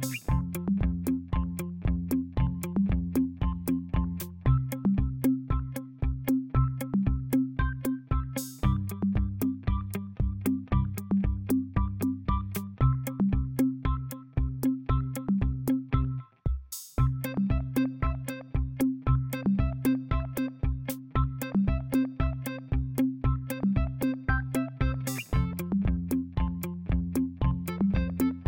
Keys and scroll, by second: 16.9 ctrl+a.